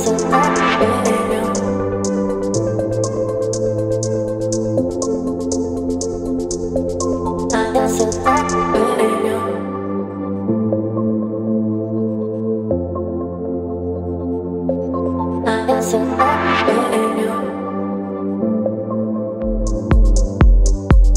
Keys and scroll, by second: 0.7 Right, 2.8 Left, 4.2 Left, 4.3 Left, 5.3 Left, 6.2 Left, 6.3 Left, 7.2 Left, 7.3 Left, 8.3 ctrl+t, 11.1 Return, 11.4 Up, 11.5 Up, 11.6 Up, 12.5 Up, 15.0 space, 17.3 space, 20.0 space.